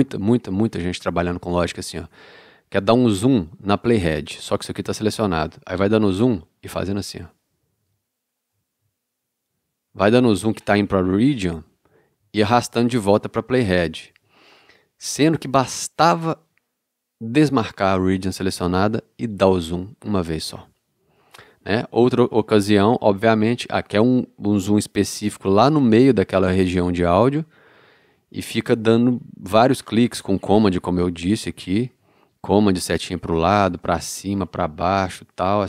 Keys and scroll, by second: 17.4 d, 32.1 super+Right, 33.7 super+Up, 34.2 super+Down, 35.2 super+Right.